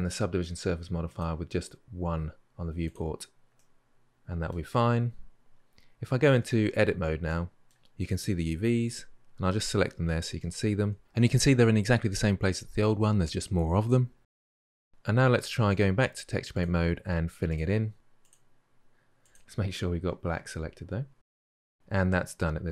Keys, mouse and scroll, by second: 3.4-6.2 middle drag, 6.2 Tab, 7.1-8.6 middle drag, 8.6 a, 14.4 Tab, 16.4-19.9 drag, 19.9-20.4 scroll down 10, 20.4 click, 21.3 drag, 21.5-22.7 middle drag.